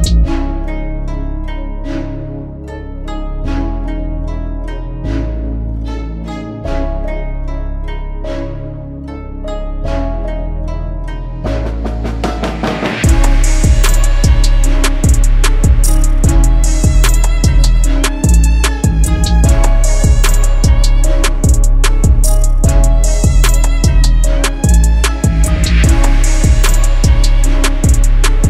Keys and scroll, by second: 1.5 c, 9.8 ctrl+q, 15.7 KP_Add, 20.0 F3, 21.7 c, 25.0 shift+F2, 25.4 Escape.